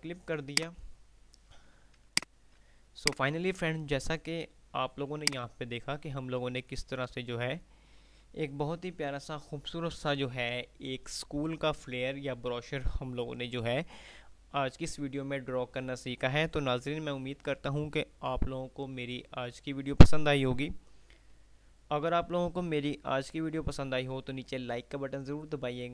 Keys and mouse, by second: 0.8 click, 3.1 right click, 4.0 F3, 4.8 F2, 9.0 F9.